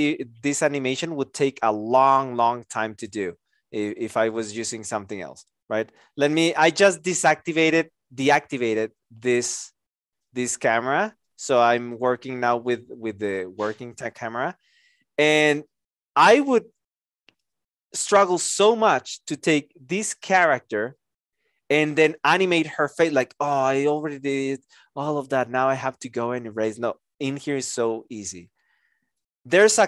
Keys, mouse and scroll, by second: 4.3 alt+click, 6.2 alt+click.